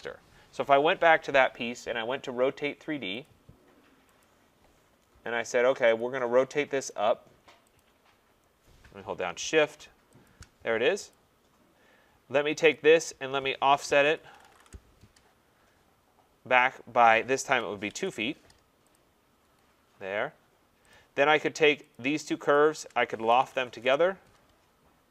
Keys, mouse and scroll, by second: 3.2 click, 4.2 click, 6.0 click, 6.9 click, 7.8 click, 10.3 shift+click, 11.1 click, 12.7 click, 13.7-15.0 typing, 17.2-19.6 typing, 18.9 click, 20.9 click, 21.9 click, 22.5 shift+click, 23.3-24.2 typing.